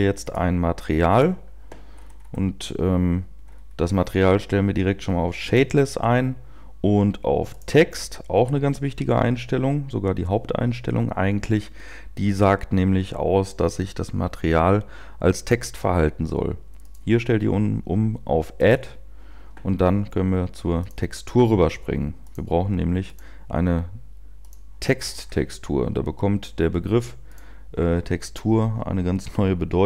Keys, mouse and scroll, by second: 0.2 click, 1.2 click, 1.9 scroll down 4, 3.4-5.4 scroll down 6, 5.4 click, 5.4-6.4 scroll down 1, 18.1 click, 20.8 click, 25.0-27.3 scroll down 6, 27.3 click.